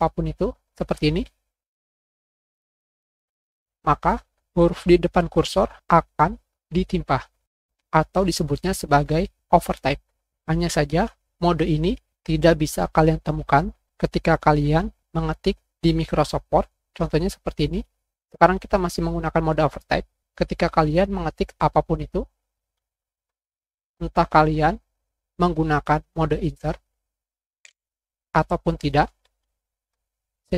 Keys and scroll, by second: 17.7 \, 25.6 Page_Up, 25.8 Scroll_Lock, 26.0 Insert, 27.5 Insert.